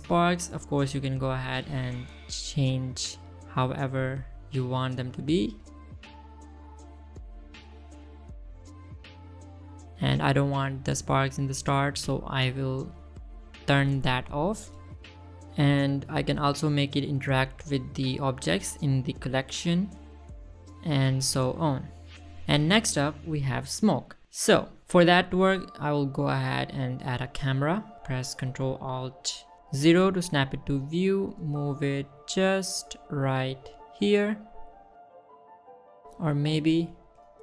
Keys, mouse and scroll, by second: 0.4 middle click, 1.6 click, 1.8 middle click, 2.6 middle click, 3.7-4.0 middle drag, 4.7 click, 6.5 click, 6.9 space, 7.9 space, 8.4-8.9 middle drag, 10.4 middle drag, 10.7 shift+middle drag, 10.8 scroll up 1, 12.3 click, 13.2 click, 13.5 space, 15.7 space, 16.0 middle click, 17.8 middle click, 18.6-20.4 drag, 21.2 middle click, 22.0 click, 22.4 middle click, 23.0 click, 23.3 middle click, 23.9 middle click, 24.6 middle click, 25.2-25.6 scroll down 1, 25.6 middle click, 26.1 shift+a, 28.2 ctrl+alt+KP_0, 29.7 g, 29.9 middle click, 30.5 click, 30.6 g, 31.2 click, 31.4-32.3 scroll up 1, 32.3 click, 32.7 scroll up 1, 34.3-34.8 middle drag, 34.9 middle click, 35.1 scroll up 2, 35.4 middle drag, 35.7 shift+middle drag, 36.1 scroll up 1, 36.2 middle click, 37.0 ctrl+alt+KP_0.